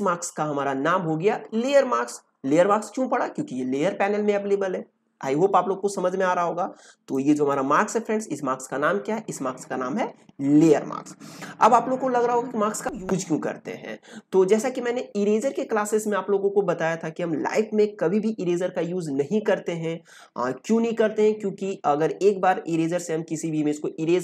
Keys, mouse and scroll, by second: 7.1-12.8 drag.